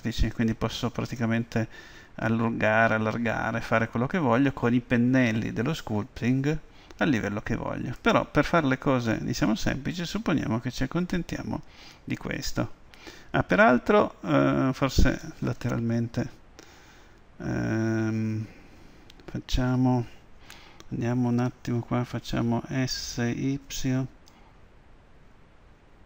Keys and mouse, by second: 8.0-9.7 drag, 9.7-16.2 middle drag, 16.2 KP_3, 23.8 s, 24.3 y.